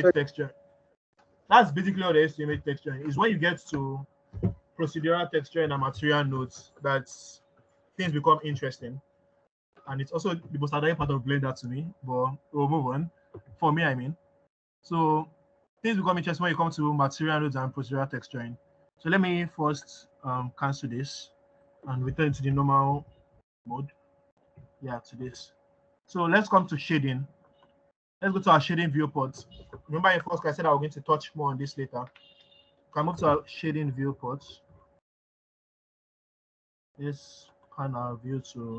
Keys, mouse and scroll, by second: 13.8-14.6 scroll down 1, 17.0-19.7 scroll up 1, 25.9 ctrl+z.